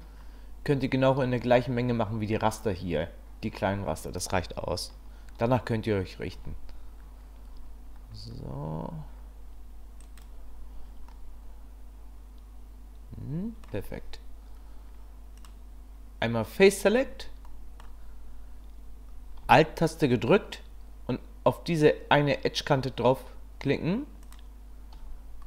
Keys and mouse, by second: 6.3 ctrl+r, 11.1-13.7 middle drag, 15.4 middle click, 17.5 middle click.